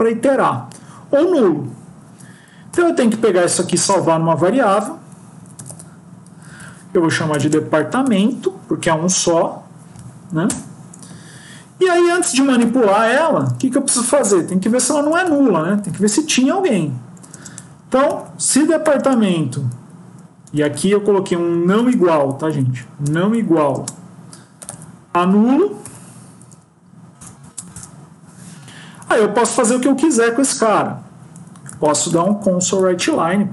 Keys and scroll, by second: 2.8 Home, 7.9 End, 14.5 Left, 20.4 BackSpace, 22.3 Left, 23.4 Right, 25.7 End, 33.0 Return.